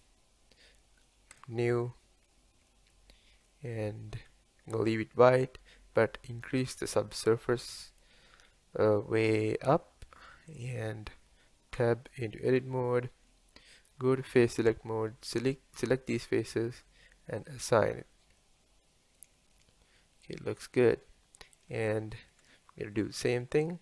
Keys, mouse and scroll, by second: 1.6 click, 7.0-8.5 drag, 8.5 scroll up 1, 9.3-10.6 middle drag, 10.6 click, 11.8 Tab, 12.6-14.3 scroll up 2, 14.3 scroll up 1, 14.4 3, 15.4 alt+click, 17.5-18.4 drag, 18.4-23.0 middle drag, 23.0-23.7 scroll up 1.